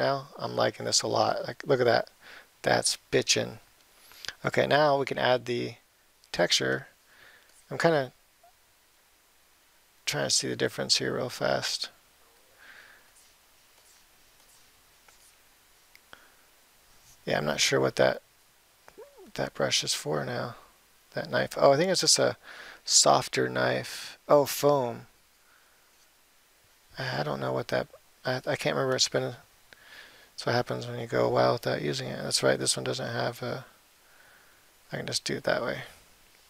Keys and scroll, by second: 33.4 ].